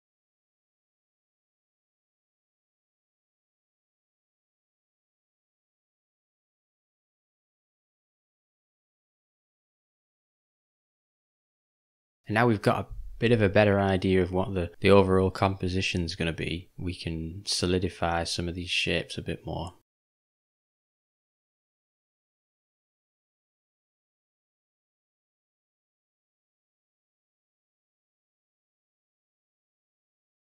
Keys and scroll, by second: 5.1 u, 11.1 j, 14.2 u, 22.1 ].